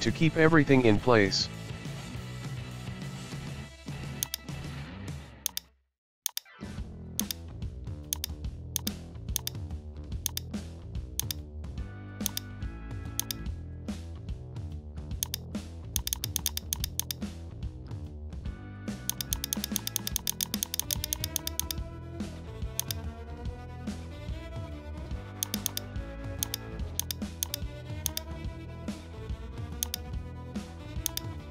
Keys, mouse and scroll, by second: 0.0 shift+middle click, 0.8 Tab, 1.2-2.7 shift+middle drag, 4.3 right click, 5.5 right click, 6.3 right click, 7.2 shift+right click, 8.1-9.4 drag, 9.4 right click, 11.2-12.7 drag, 13.2 right click, 13.5-15.0 middle drag, 15.3-17.7 drag, 17.7 ctrl+z, 17.9-19.1 middle drag, 19.1-22.1 drag, 22.1 middle click, 22.8 right click, 23.1 middle click, 23.7 scroll down 1, 23.9-25.4 middle drag, 25.4-26.0 drag, 26.0 shift+middle click, 26.4 right click, 27.0-29.6 drag, 30.1 click, 30.4 scroll down 1, 30.6-31.2 shift+middle drag, 31.2 right click.